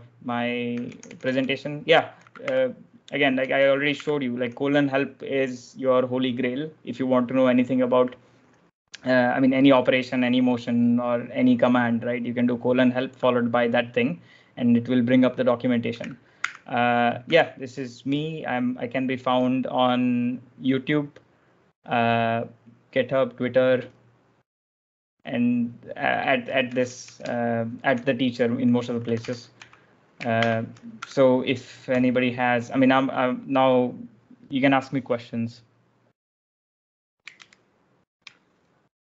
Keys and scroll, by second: 0.4-4.3 typing, 16.2 ctrl+f, 26.5-27.5 typing, 28.6-30.8 typing, 37.3 super+Tab, 38.9 super+Tab.